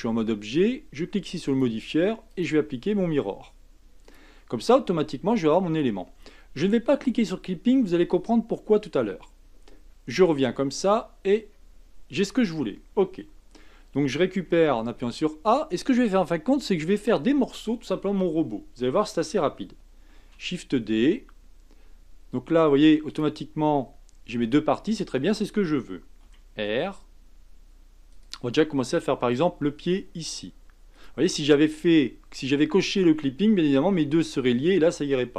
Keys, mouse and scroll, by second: 1.4 click, 2.3-5.3 drag, 10.1 Tab, 10.6-11.2 scroll up 3, 11.2-14.3 scroll down 2, 14.5 a, 15.8-16.2 scroll down 1, 16.2-19.1 scroll up 1, 20.2 shift+d, 26.2 r, 29.2 g.